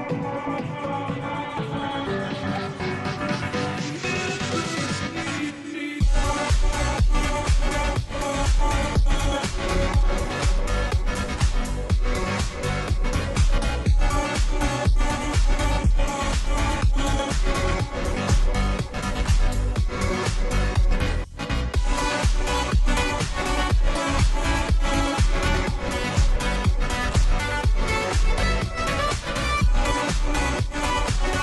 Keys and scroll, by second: 5.1 Down, 27.9 ctrl+j.